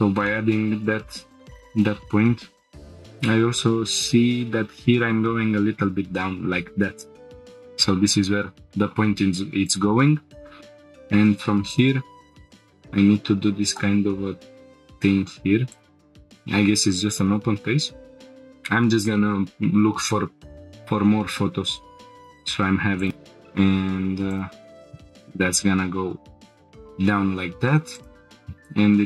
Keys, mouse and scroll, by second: 0.3-0.6 shift+middle drag, 0.8-1.6 scroll up 1, 1.7-2.4 drag, 3.0 click, 3.8 g, 4.0 z, 7.4 click, 9.7-11.7 drag, 17.5 g, 17.5 z, 22.1-23.1 drag, 23.1 shift+middle click, 23.1 scroll up 4, 24.3 click, 25.1 g, 25.2 z, 26.8-28.1 drag, 28.3 shift+middle click, 28.3 scroll down 2, 28.3 g, 28.7 x.